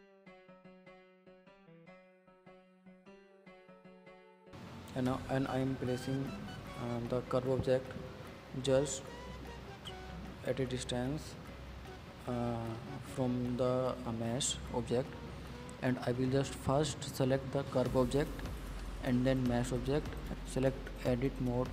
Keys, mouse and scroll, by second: 0.5 shift+d, 1.6-2.1 scroll down 5, 2.1-3.2 drag, 3.5-4.2 scroll up 11, 4.8 click, 5.3 click, 6.0 scroll down 4, 6.3-7.8 middle drag, 8.8-10.0 middle drag, 10.0 ctrl+j, 10.4 click, 10.8 drag, 11.0 click, 11.6 click, 11.8-13.0 middle drag, 13.0 KP_1, 13.7-14.9 scroll up 6, 14.9 click, 15.9 click, 16.4 middle click, 16.6 scroll down 3, 16.8 click, 16.9 middle drag, 17.1 scroll up 3, 17.3-18.5 shift+middle drag, 18.9 click, 19.8 shift+click, 20.4-21.7 middle drag.